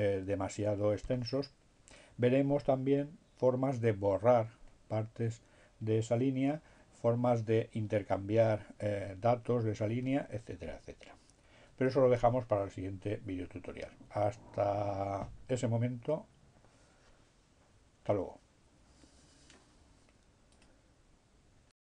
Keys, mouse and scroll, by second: 20.7 click, 21.7 click.